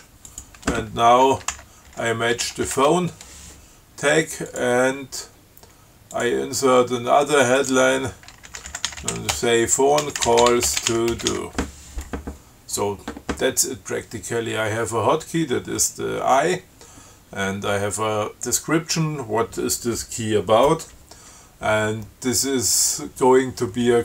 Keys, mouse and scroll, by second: 0.5 click, 1.8-3.5 typing, 4.7 click, 6.4 click, 7.8 click, 8.5-12.1 typing.